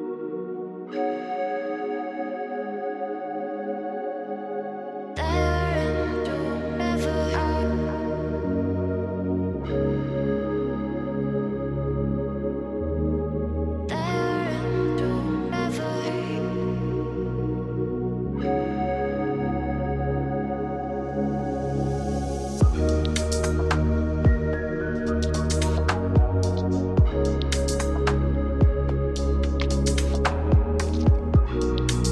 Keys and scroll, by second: 11.4 ctrl+a, 17.4 ctrl+t.